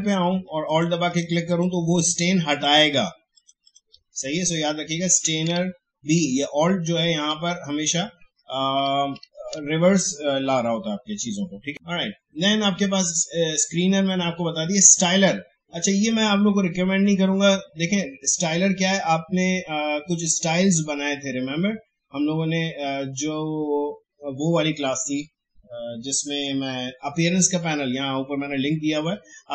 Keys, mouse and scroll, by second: 5.5 ctrl+z, 11.7-17.5 drag.